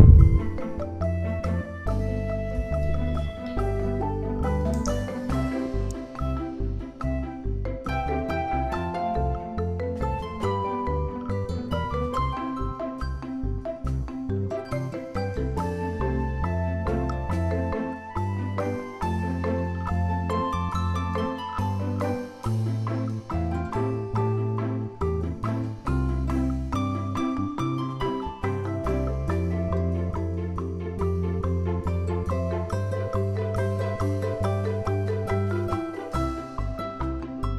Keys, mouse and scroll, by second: 0.5-1.2 scroll up 8, 2.0 click, 3.3 shift+d, 5.5 KP_7, 7.0 r, 8.3 ctrl+z, 8.7 r, 10.6 g, 12.1 KP_1, 13.2 click, 13.5-16.6 scroll down 2, 16.6 click, 17.2 shift+d, 18.3-19.2 scroll up 4, 19.2 click, 22.7 click, 23.2 click, 25.4 click, 26.4 click, 29.1 click, 30.0 r, 31.8 s, 34.0 r, 34.8 g, 36.3-36.8 scroll up 4, 36.8 s.